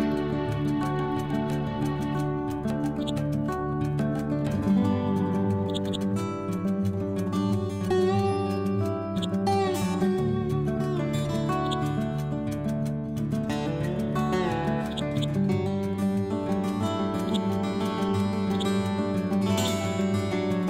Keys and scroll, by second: 4.7 ctrl+c, 6.6 F12, 7.3 4, 7.5 Return, 8.1 ctrl+v, 10.7 ctrl+z, 12.7 F12, 13.3 3, 13.5 Return, 13.9 ctrl+v, 15.6 Down, 16.8 Left.